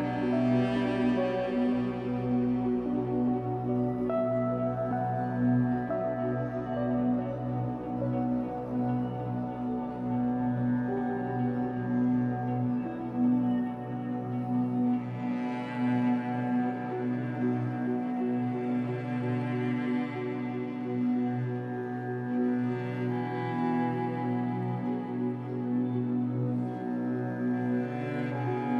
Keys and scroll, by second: 2.9 Escape, 3.3 3, 4.1 shift+Tab, 5.4 shift+Tab, 6.1 Escape, 6.3 3, 10.9 b, 13.3 Escape, 13.6 3, 14.4 shift+Tab, 15.0 Escape, 18.8 3, 20.6 l, 21.8 shift+Up, 22.7 m, 25.7 Escape.